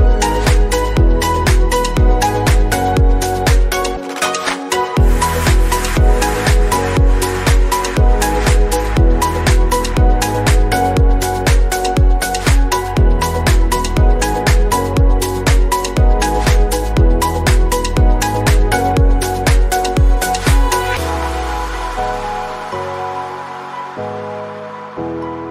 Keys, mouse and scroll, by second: 0.1 middle click, 0.6 KP_1, 1.0-1.5 scroll up 4, 1.2 alt+z, 1.5 shift+middle click, 1.8-2.3 scroll down 2, 2.3 alt+z, 2.4 click, 2.7 middle click, 3.3-3.6 scroll up 1, 3.6-4.6 middle drag, 4.6 alt+z, 4.9-5.3 scroll up 1, 5.3 click, 5.4-6.8 middle drag, 6.8 alt+z, 7.1-8.8 middle drag, 8.8 click, 9.4-10.0 scroll up 1, 10.0-11.0 drag, 11.0 /, 11.3 scroll down 1, 11.4-25.5 middle drag.